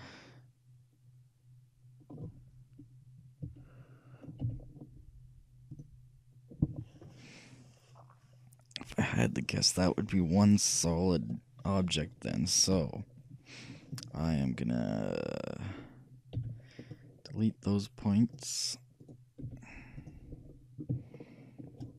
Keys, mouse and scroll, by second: 3.5 KP_3, 4.5 z, 16.5 c, 19.2-20.8 right drag, 19.5 x, 21.2-21.9 middle drag.